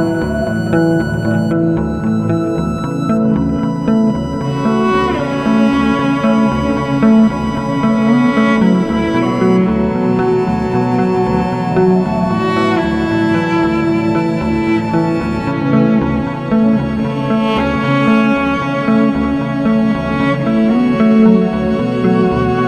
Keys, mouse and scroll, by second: 0.3 middle click, 0.9 right click, 1.5-2.0 scroll, 2.1 click, 3.1 alt+w, 3.7 alt+w, 5.2 ctrl+alt+middle click, 6.3 middle click, 8.7 click, 9.0 scroll, 10.2 i, 12.7 click, 16.3 click, 18.3 click, 22.4 click.